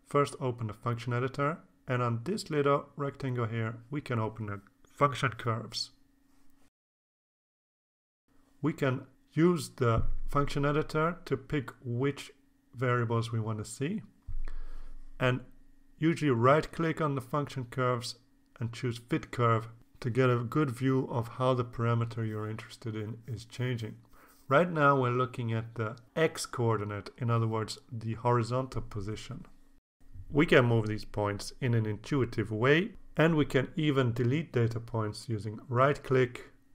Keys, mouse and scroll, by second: 2.2 click, 3.7 right click, 6.2 click, 7.2-8.4 drag, 10.5 click, 12.8 click, 16.3-17.3 drag, 17.8 right click, 19.0 click, 31.9-34.9 drag, 35.2 right click, 36.4 click.